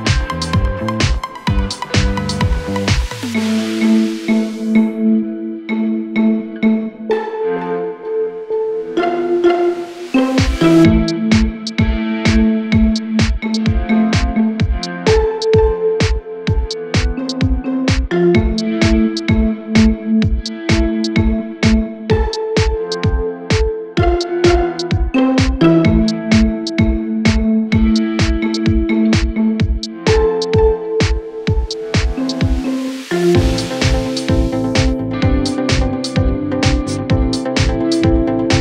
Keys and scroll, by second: 6.4 ], 7.0 ], 8.6 ], 11.0 ctrl+z, 13.6 4, 15.5 3, 18.5 ], 20.7 4, 22.5 shift+i, 25.0 3, 26.1 ctrl+z, 27.2 4, 28.0 3, 35.4 3.